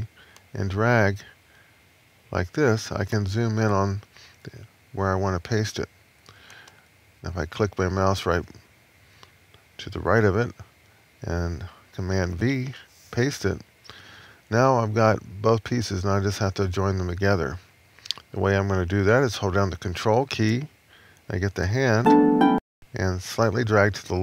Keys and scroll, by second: 12.1 super+v.